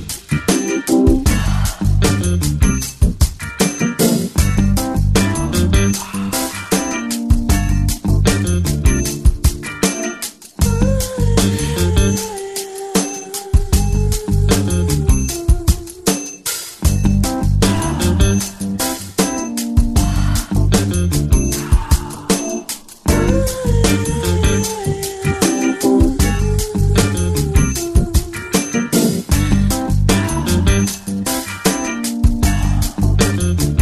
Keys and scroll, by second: 5.4 x, 33.3 ctrl+space.